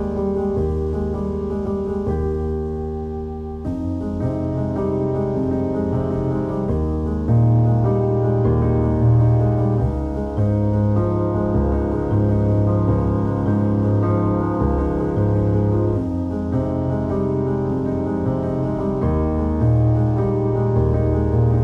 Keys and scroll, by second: 18.0 ctrl+j.